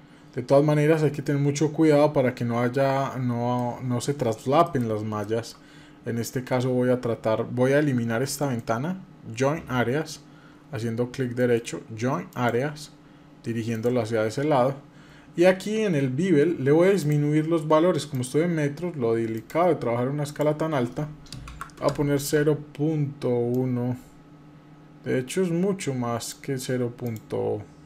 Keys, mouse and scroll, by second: 1.8 scroll up 1, 2.2 scroll down 1, 3.3 middle click, 4.4 shift+middle click, 8.2-14.2 right drag, 16.8-22.1 drag, 23.3-26.1 drag, 26.8-27.8 drag.